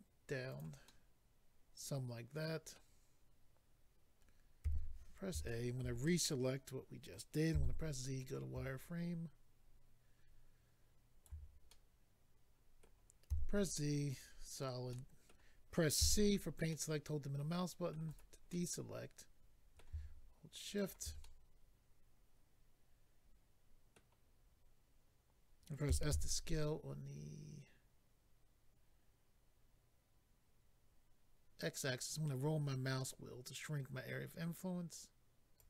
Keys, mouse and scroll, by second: 0.5 click, 0.6 click, 0.8 middle click, 4.6 a, 5.4 shift+middle click, 6.0 middle click, 7.5 z, 8.2 middle click, 8.2 click, 8.8 ctrl+right click, 11.7 middle click, 13.3 z, 14.1 click, 14.4-14.9 scroll up 3, 14.9 middle click, 16.0 c, 16.7 middle click, 18.1 right click, 18.5 middle click, 20.8 shift+click, 24.0 middle click, 32.0-33.3 scroll up 4, 35.6 click.